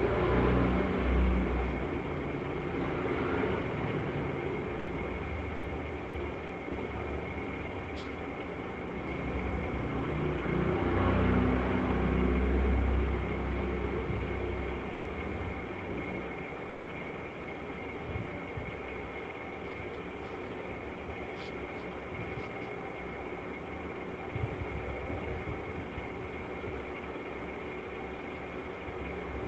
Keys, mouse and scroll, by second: 0.3 click, 1.4 click, 1.6 click, 1.8 click, 3.9 click, 7.1 click, 7.7 click, 9.6 click, 12.7 click, 16.8 click, 18.2 click, 19.1 click, 20.4 click, 22.2 click, 22.4 click, 23.4 click, 24.3 click, 25.3 click, 25.4 click, 25.6 click, 25.8 click, 26.4 click, 26.9 click, 27.2 click.